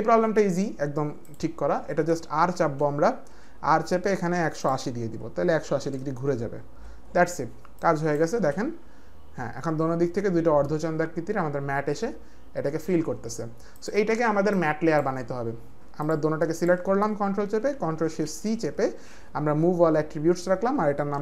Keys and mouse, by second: 1.2 click, 3.3 click, 3.3 r, 5.7-6.1 typing, 6.3 Return, 7.8 click, 8.3 space, 13.7 click, 14.6 click, 16.0 click, 16.5 ctrl+click, 18.3 ctrl+shift+c, 20.9-21.2 typing.